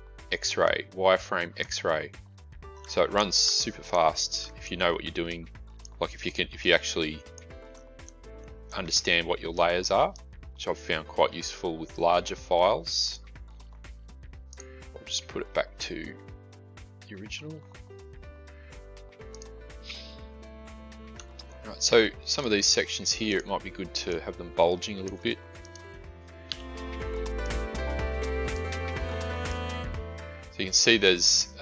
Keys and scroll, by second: 26.4 Delete.